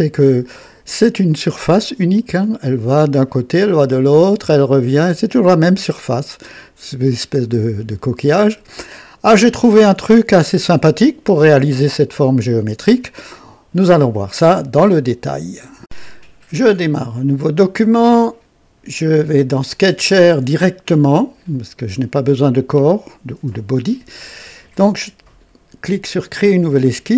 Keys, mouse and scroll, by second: 1.8-9.1 drag, 11.8-13.4 drag, 17.2 click, 19.4-21.7 drag, 26.0 click.